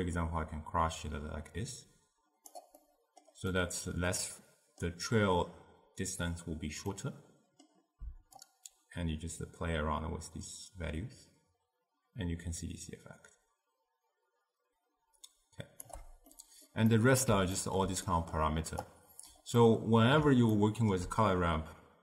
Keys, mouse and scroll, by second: 2.9-6.6 middle drag, 7.0-8.1 middle drag, 8.4-11.4 shift+drag, 16.4-18.9 middle drag, 18.9 click, 19.7-22.0 middle drag.